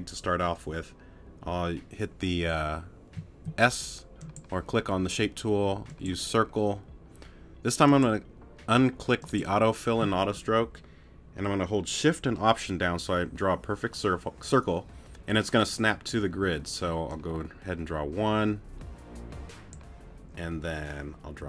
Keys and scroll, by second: 3.2 s.